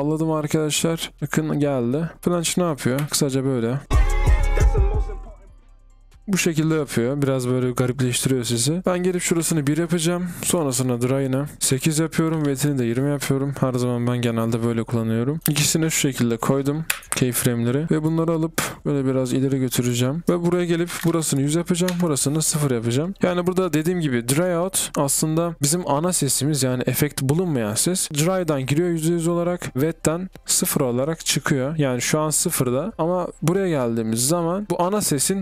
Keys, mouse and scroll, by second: 17.7-18.4 typing, 20.0-21.5 typing, 27.3 typing.